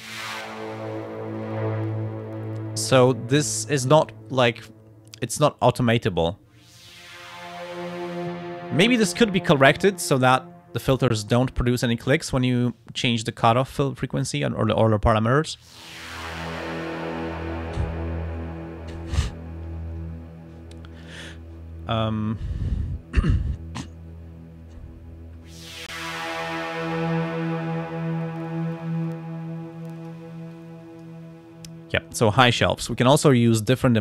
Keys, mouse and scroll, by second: 4.1-5.5 drag, 28.2-30.3 drag, 30.5 click, 32.8 click.